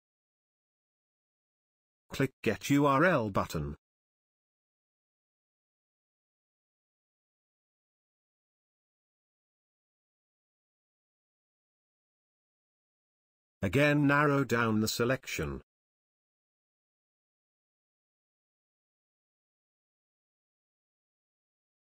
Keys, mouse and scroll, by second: 0.8 click, 4.7 click, 5.3 click, 9.7-11.2 drag, 13.7-15.3 drag.